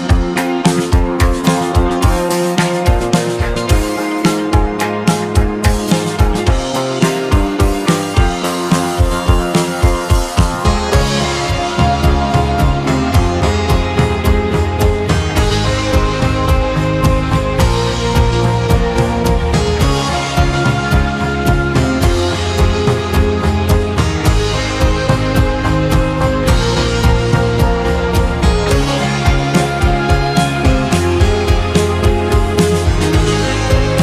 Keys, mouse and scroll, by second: 6.9 g, 11.3 scroll up 1, 12.1-12.5 scroll up 2, 25.2-27.6 middle drag, 27.6-28.3 scroll up 2, 28.3-29.2 middle drag, 31.2-31.6 scroll down 2, 31.6 scroll up 1, 33.3-33.8 shift+middle drag, 33.8-34.0 scroll up 1.